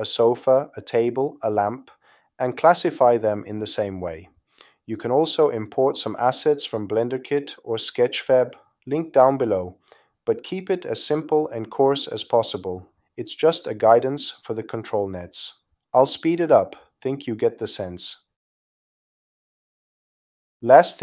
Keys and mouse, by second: 0.0 l, 0.7 right click, 1.1 click, 1.4 shift+click, 2.1 click, 3.4 click, 3.8 click, 4.1 click, 4.4 s, 4.7 click, 4.8 o, 5.0 click, 5.1 o, 5.6 click, 5.7 click, 6.1 click, 6.9 click, 7.4 click, 7.6 click, 7.9 click, 8.3 click, 9.0-11.5 typing, 9.1 click, 10.1 click, 10.9 click, 13.1-14.1 typing, 14.9 click, 15.6 click, 15.7 click, 16.8 super+z, 17.4 click, 17.8 click, 17.9 x, 18.0 click, 18.2 middle click, 18.4 click, 18.5 middle click, 18.6 click, 18.7 middle click, 18.8 click, 18.9 super+middle click, 19.1 click, 19.3 middle click, 19.5 click, 19.5 middle click, 19.6 click, 20.3 click.